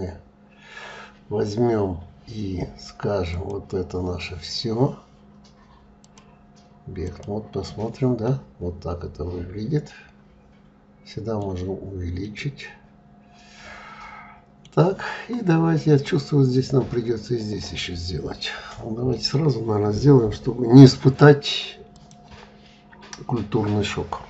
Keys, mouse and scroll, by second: 2.9 click, 5.6-7.8 drag, 7.8-10.8 middle drag, 11.8-14.8 middle drag, 17.9 scroll up 2, 18.7-21.5 middle drag, 21.5 click.